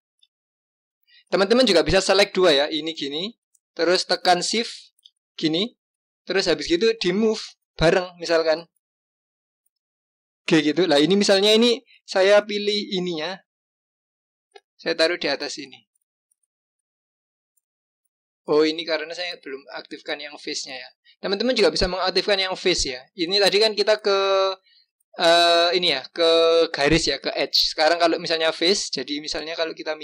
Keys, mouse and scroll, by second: 0.4 shift+click, 1.8 click, 2.5 click, 4.4 shift+click, 9.6 g, 11.6-12.1 scroll up 3, 12.1-13.0 scroll down 3, 13.0-13.6 scroll down 1, 13.6-15.2 scroll down 1, 16.1-18.9 scroll up 2, 19.8 click, 20.7-21.6 scroll down 2, 27.4 click.